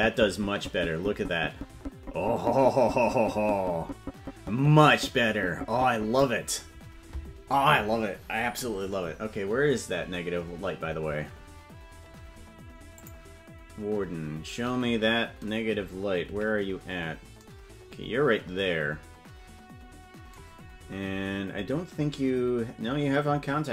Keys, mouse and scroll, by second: 12.9 click, 16.4 KP_Decimal.